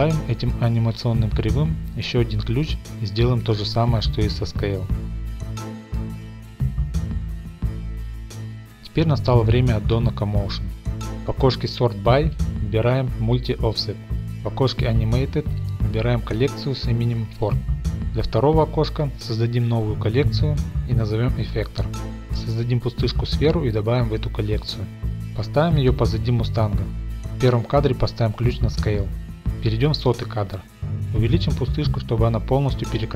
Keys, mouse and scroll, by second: 1.0-5.0 drag, 3.3 i, 5.4 ctrl+shift+middle click, 5.5 Home, 6.0 drag, 6.1-8.5 typing, 6.3-6.6 drag, 6.6 middle click, 6.8 ctrl+x, 6.9 ctrl+z, 7.1 scroll, 7.8 click, 7.9 click, 8.3 shift+scroll, 8.4 click, 12.5 click, 16.6 click, 17.1 click, 18.7 click, 19.0 click, 19.1 click, 19.7-22.4 typing, 20.7 click, 21.6 Return, 22.1 scroll, 23.3 click, 24.2 m, 24.6 click, 24.9 click, 25.2 click, 25.5 middle click, 26.0 shift+middle click, 26.4 g, 26.8 shift+middle click, 27.2 click, 27.5 Left, 28.4 i, 29.2 click, 30.9 click, 31.1-31.5 shift+scroll, 31.5-33.1 shift+middle drag, 32.7 s.